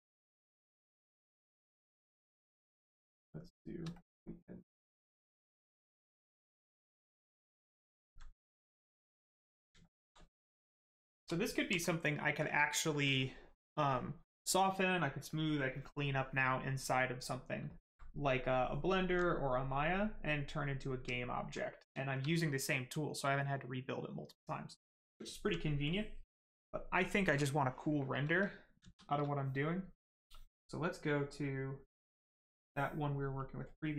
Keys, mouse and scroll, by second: 2.9 click, 3.4 click, 3.9 click, 6.1 right click, 6.6 shift+right click, 7.5 shift+click, 7.9 alt+right click, 8.6 right click, 8.7 right click, 9.2 alt+right click, 10.5 right click, 10.6 right click, 11.0 shift+right click, 11.3 alt+right click, 17.6 right click, 18.5 alt+right click, 19.4 right click, 19.5 right click, 21.1 alt+right click, 21.4 right click, 21.5 right click, 25.2 alt+right click, 25.8 click, 28.7 shift+z, 31.0 click, 33.3 click.